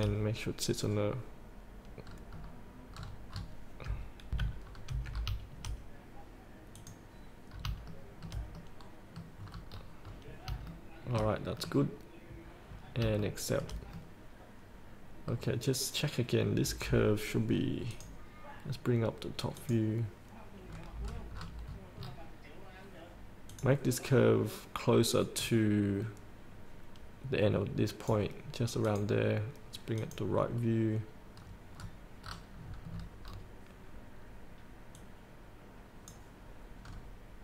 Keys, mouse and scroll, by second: 2.3-3.2 scroll down 1, 3.2-4.6 scroll up 1, 4.6 F8, 4.9-5.5 scroll up 1, 6.9 click, 7.7 scroll up 1, 8.1 shift+middle click, 8.8 middle click, 9.6 scroll down 1, 10.9 shift+middle click, 12.9-13.4 scroll up 1, 13.4 shift+middle click, 14.2-16.0 middle drag, 16.9 click, 20.9-22.0 scroll down 1, 22.3-22.8 scroll down 1, 23.7-28.3 drag, 31.7-32.1 scroll down 1, 32.5 scroll down 1, 33.1 scroll down 1, 35.1-36.7 drag, 37.0-37.4 scroll down 1.